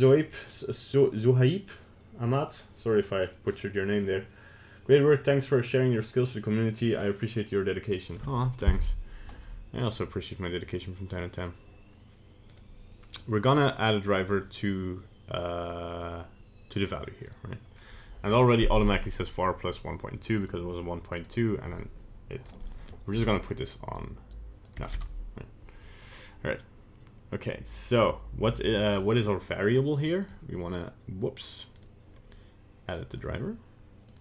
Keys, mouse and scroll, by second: 10.7 click, 12.5 right click, 21.2 click, 22.7 click, 25.0 BackSpace, 31.8 right click.